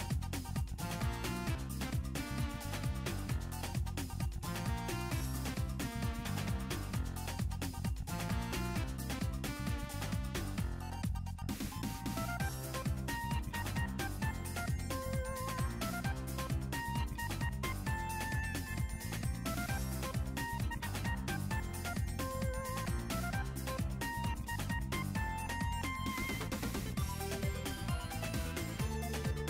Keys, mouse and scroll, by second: 1.0 click, 3.4 click, 6.9 click, 8.8-10.1 drag, 10.9 click, 11.6 click, 15.5 r, 19.6 click, 19.8 r, 21.0 scroll down 1, 21.7-22.1 scroll up 1, 23.3 click, 23.9-24.5 scroll up 4, 24.5-24.9 scroll down 3, 25.3 click, 27.0-29.4 drag.